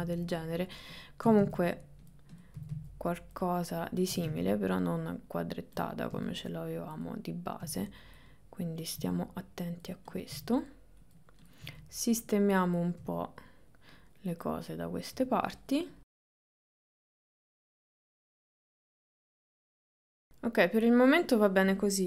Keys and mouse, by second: 1.3 g, 2.4 click, 4.2 g, 5.8 click, 6.2 g, 9.0 g, 10.4 g, 12.8 click, 13.0 g, 15.2 g, 16.8 click, 17.6-19.9 typing, 20.2-21.6 middle drag.